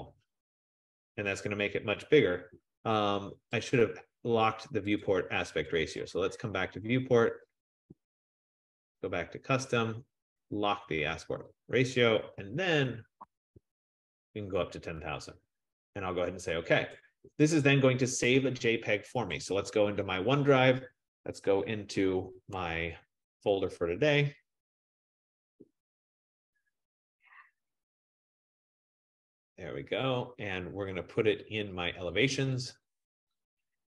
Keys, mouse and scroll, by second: 0.7-1.4 typing, 3.8 click, 5.2 click, 5.9 click, 6.7 click, 7.8 click, 9.1 click, 17.2 click, 19.5 click, 23.8 click, 24.0 click, 25.0 click, 25.4 click, 26.3 click, 26.4 click, 28.5 click, 28.7 click, 32.8 click, 32.9 click.